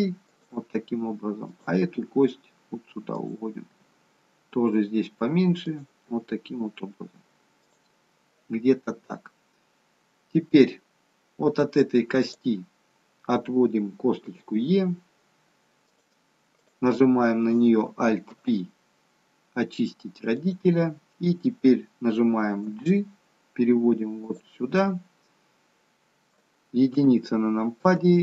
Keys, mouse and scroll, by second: 1.4 click, 1.9 e, 3.6 e, 6.0 e, 12.4 click, 14.2 e, 16.5 click, 18.3 alt+p, 22.6 g, 24.7 middle click, 26.9 KP_1, 27.9 g.